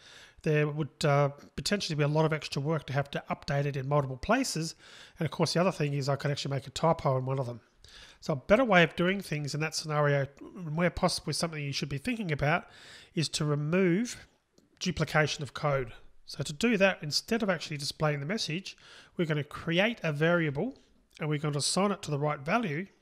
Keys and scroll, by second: 8.0 super+z, 13.1 super+z.